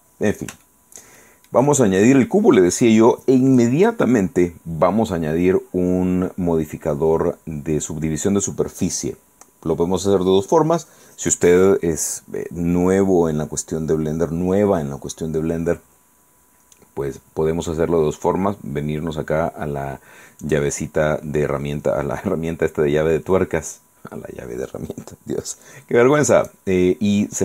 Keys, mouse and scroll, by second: 0.3 scroll down 1, 0.7-2.6 shift+middle drag, 20.5 click, 26.5 click.